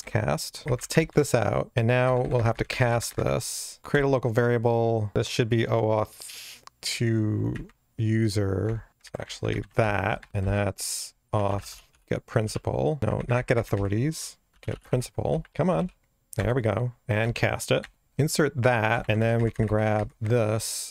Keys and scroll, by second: 1.7 Delete, 3.8 alt+Return, 8.8 Return, 9.5 alt+shift+Right, 11.3 Delete, 13.0 Return, 13.1 alt+shift+Left, 15.3 Delete, 15.5 alt+shift+space, 16.4 Return, 17.2 alt+Return, 18.9 Return, 19.9 alt+shift+Left, 20.1 super+x.